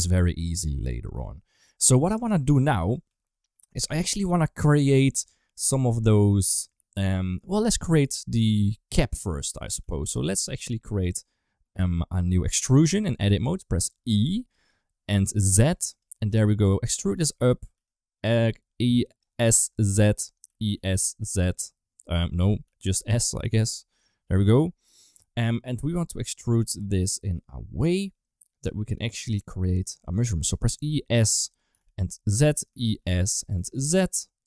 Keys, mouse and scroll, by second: 1.6 KP_1, 2.6 middle click, 2.9 2, 3.5 1, 4.0 2, 8.4 KP_1, 9.6 g, 10.3 shift+middle click, 14.0 e, 16.1 s, 16.9 g, 17.6 e, 19.3 g, 20.3 e, 22.5 s, 23.3 g, 25.3-29.7 middle drag, 30.4 e, 31.6 g, 32.4 e, 33.4 g.